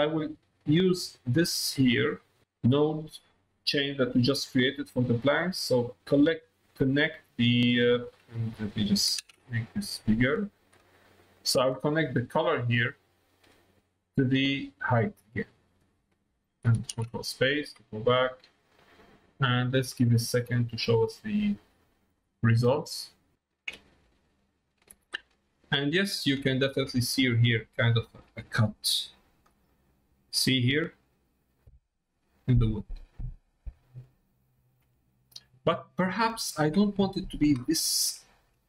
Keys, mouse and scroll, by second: 0.8-2.4 drag, 3.7 middle click, 5.0 middle click, 6.1 middle click, 10.0 ctrl+space, 10.7 middle click, 12.6-15.2 drag, 16.9 ctrl+space, 18.5 click, 20.0 middle click, 21.0 shift+middle click, 23.3 middle click, 25.4 ctrl+middle click, 26.5 shift+middle click, 28.5 shift+middle click, 29.6 middle click, 33.5 middle click, 34.9 middle click, 36.2 middle click, 37.1 middle click, 37.6 shift+middle click, 38.2 middle click.